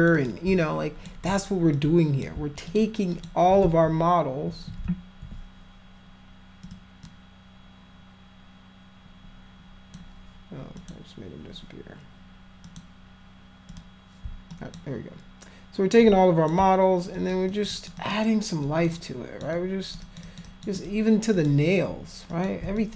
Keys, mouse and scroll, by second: 0.0 alt+click, 0.2 alt+click, 0.6 shift+click, 1.8 alt+click, 2.7 alt+click, 3.1 alt+click, 3.6 ctrl+z, 4.9 ctrl+z, 6.7 click, 7.1-10.0 drag, 10.8 click, 12.7 click, 13.7 click, 14.5 alt+click, 16.0 alt+click, 17.2 alt+click, 17.5 alt+click, 17.7 alt+click, 18.0 alt+click, 18.7 alt+click, 19.0 alt+click, 19.6 alt+click, 20.0 alt+click, 20.3 alt+click, 20.5 alt+click, 20.8 alt+click, 21.4 alt+click, 22.3 alt+click, 22.8 shift+click.